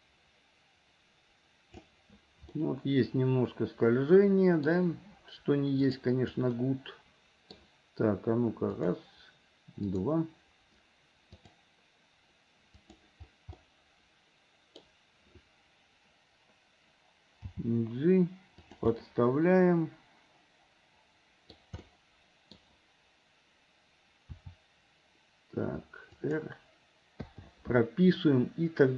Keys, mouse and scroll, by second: 2.6-4.7 middle drag, 5.9 click, 6.6 middle click, 8.8 click, 9.8 click, 11.3 click, 12.8 click, 13.6-14.8 middle drag, 17.6 g, 19.0-21.5 middle drag, 21.5 scroll down 1, 21.8 scroll up 1, 22.0 middle click, 24.3 r, 27.3 i.